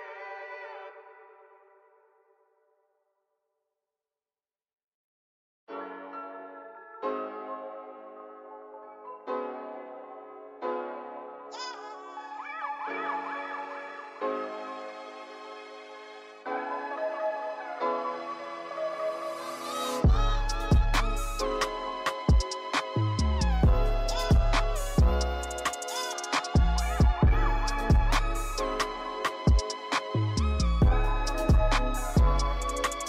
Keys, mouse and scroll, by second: 0.4-1.0 drag, 2.7-5.7 drag, 5.7-6.1 scroll up 1, 6.1 click, 6.6 click, 7.3 click, 10.0 click, 11.3-13.2 drag, 13.2-14.3 shift+middle drag, 14.3 click, 16.8-19.6 drag, 20.3-22.0 drag, 22.0-22.4 shift+middle drag, 22.4-22.7 scroll up 2, 22.7 click, 24.2-25.6 drag, 27.5-31.8 drag, 32.2 scroll up 1, 32.9-33.0 drag.